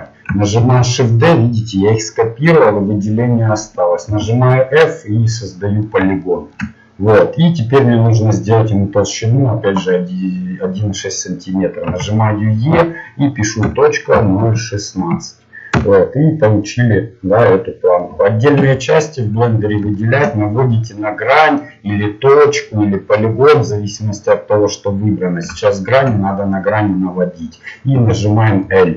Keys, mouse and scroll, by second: 0.6 shift+d, 2.2 middle click, 4.1 f, 8.4-11.9 middle drag, 11.9 e, 16.6 middle click, 17.0 middle click, 17.2-18.7 middle drag, 18.7 a, 19.0 middle click, 25.7-27.9 middle drag, 27.9 l, 28.6-28.9 middle drag.